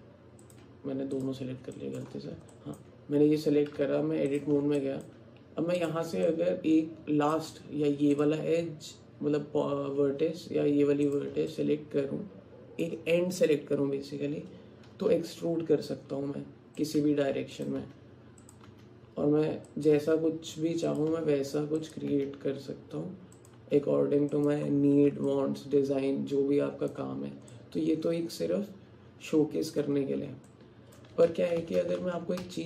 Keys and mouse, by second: 1.2 click, 1.8 click, 2.5 alt+click, 3.8 Tab, 4.8 alt+click, 5.9 click, 6.3-7.3 alt+drag, 8.2 click, 11.1 click, 11.5 middle click, 11.6-12.9 alt+drag, 15.0 e, 17.0 e, 17.8 e, 18.7 e, 20.0 e, 21.1 e, 22.1 e, 23.6 e, 25.3-27.0 alt+drag, 27.5-29.8 alt+drag, 30.5 alt+click, 31.3 ctrl+z, 31.6 ctrl+z, 31.8 ctrl+z, 32.0-32.6 ctrl+z.